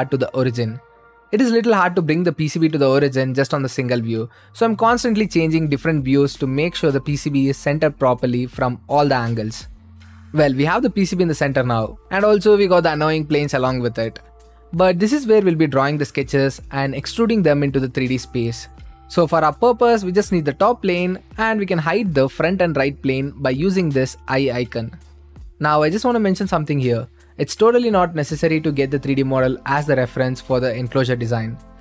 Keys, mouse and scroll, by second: 0.0-2.8 drag, 5.0-16.0 right drag, 16.0-17.1 drag, 18.2-19.4 drag, 19.4 right click, 20.1-22.2 right drag, 24.0-25.1 drag, 26.3-27.7 drag, 27.7-29.6 right drag, 29.6-30.6 drag, 30.7-31.8 right drag.